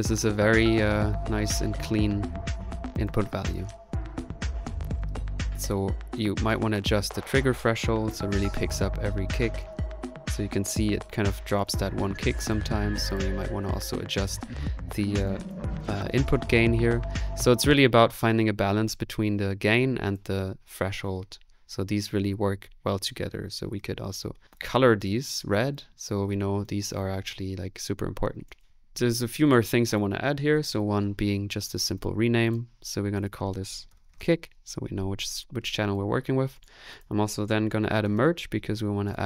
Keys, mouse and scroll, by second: 1.8 middle click, 2.9 click, 3.2 click, 3.8 middle click, 6.3-8.0 drag, 9.6-11.1 drag, 12.3 click, 13.2 click, 14.1 click, 14.3 click, 17.5 space, 23.5-24.4 typing, 26.1 typing, 30.3-31.2 typing, 37.2-38.6 typing.